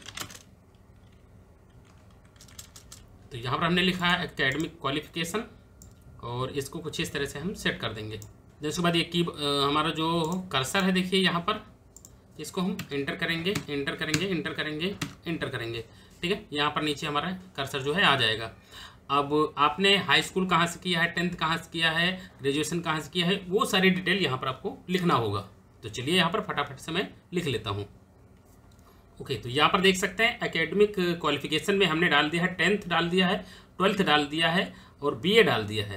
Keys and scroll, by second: 0.0-1.8 typing, 12.5 Return.